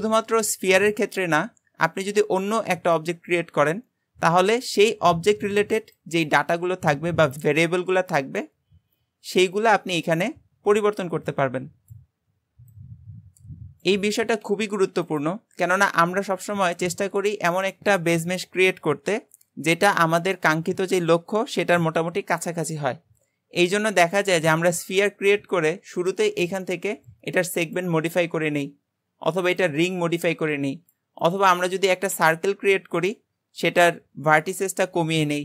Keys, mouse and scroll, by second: 0.3 click, 1.2 shift+a, 3.7-5.4 scroll up 1, 5.4-6.0 scroll up 1, 6.0-8.4 drag, 9.5-12.6 drag, 12.7-14.7 drag, 14.7 x, 15.8 shift+a, 26.1-29.1 drag, 29.6-31.3 drag, 31.5 x, 31.9 shift+a, 34.3-35.4 drag.